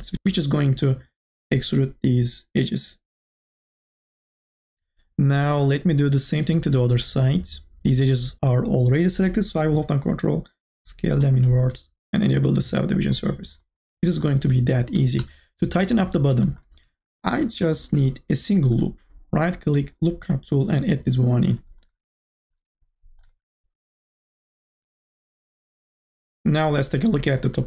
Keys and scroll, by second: 0.1 ctrl+z, 17.8 k, 18.3 l.